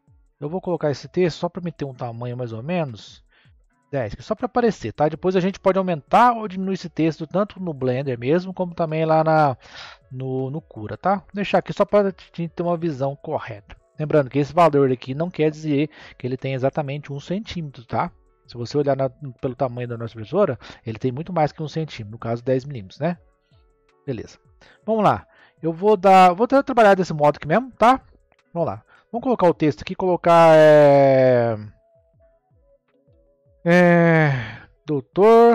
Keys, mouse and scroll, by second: 0.6-3.7 drag, 10.1-11.0 middle drag, 11.0 click, 12.1 click, 13.2-16.4 middle drag, 17.9 scroll down 2, 19.3 click, 19.8-21.4 scroll down 2, 21.4-23.7 scroll down 1, 23.7 click, 24.4-26.2 scroll up 1, 26.2-27.3 scroll up 1, 27.3-28.9 scroll up 1, 28.9 Tab, 29.9 BackSpace, 34.2 shift+d, 34.4 r.